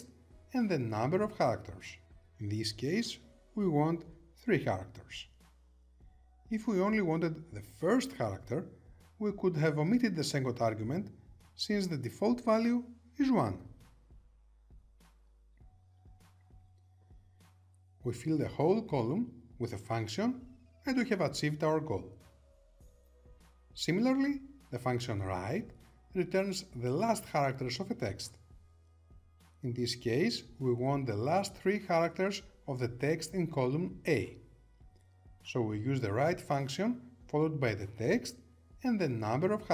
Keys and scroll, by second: 10.9 Return.